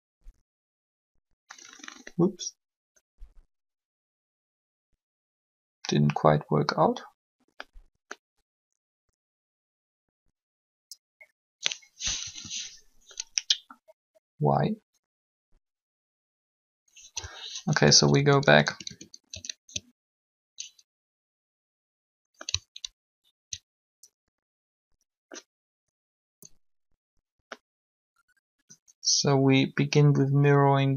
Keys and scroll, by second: 12.2 3, 17.8 ctrl+z.